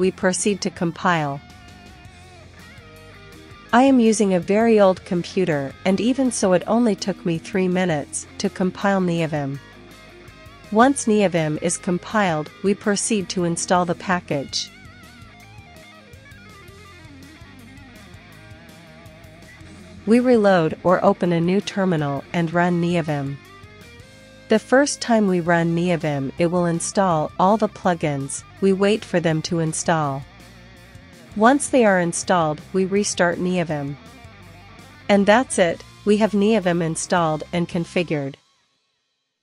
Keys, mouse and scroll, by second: 0.9 ctrl+c, 1.3-2.6 ctrl+drag, 2.8 ctrl+l, 3.4 ctrl+shift+v, 3.9 space, 6.4 Return, 8.8 Return, 10.0 Return, 10.6 ctrl+super+h, 14.3 click, 16.1 ctrl+l, 16.5 ctrl+v, 16.9 space, 17.5 Return, 21.8 ctrl+*, 22.6 ctrl+*, 22.7-24.2 typing, 30.4-32.7 typing, 33.0 Return, 34.1 shift+;, 34.8 Return, 36.1-39.4 typing, 37.7 Right.